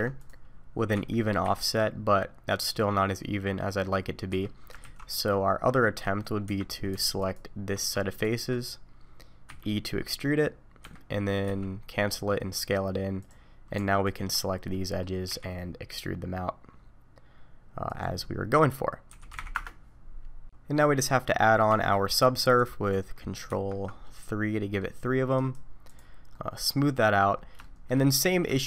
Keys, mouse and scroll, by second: 4.8 ctrl+z, 5.1 middle click, 6.0-6.4 scroll up 1, 6.4 3, 7.2 alt+click, 8.1 shift+click, 9.4 e, 11.4 s, 14.0 alt+click, 14.4 scroll down 3, 14.7 middle click, 15.3 e, 19.1 s, 20.2 middle click, 21.1-21.7 scroll up 2, 21.4 middle click, 21.7 Tab, 22.1-22.6 scroll down 1, 22.6 click, 23.6 ctrl+3, 24.0 middle click, 25.3 right click, 26.3 middle click, 27.3 scroll up 1, 27.6 shift+middle click, 28.0 middle click, 28.5 shift+middle click.